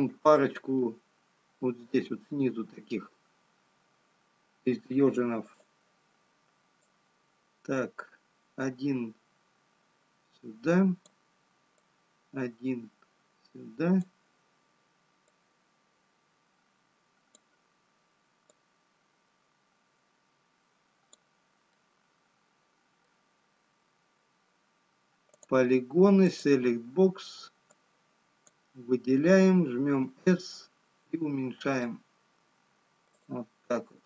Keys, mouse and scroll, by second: 0.4 click, 3.4 Tab, 6.6 Tab, 6.6 click, 8.3 click, 12.6 click, 15.8 click, 22.5 middle click, 25.1-26.8 scroll up 4, 26.8 click, 30.2 s.